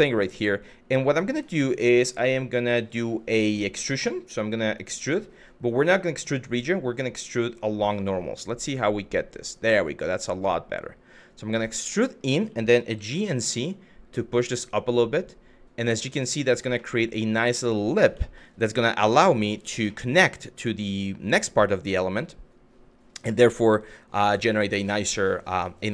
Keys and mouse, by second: 4.4 click, 5.4-7.5 drag, 12.5 g, 12.8 z, 16.1 click, 16.5-17.6 middle drag, 17.9 shift+middle click, 19.2 click, 19.6 middle click, 23.9 middle click, 24.6 shift+middle click, 25.2 middle click.